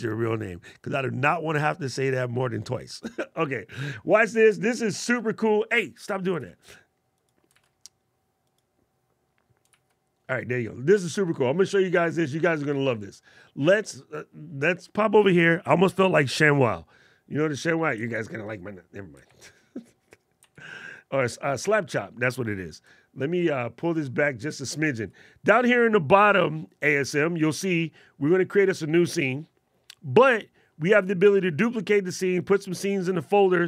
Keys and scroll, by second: 6.0 shift+super+z, 7.4 super+z, 9.4 super+z, 17.8 alt+super+8, 19.2 alt+super+8, 20.2 alt+super+8.